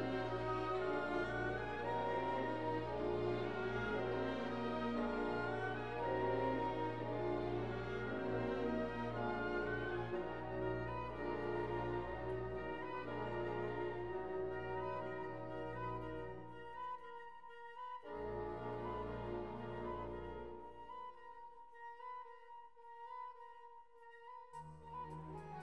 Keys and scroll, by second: 12.0 Escape, 17.3 alt+q, 19.3 p, 21.3 alt+q.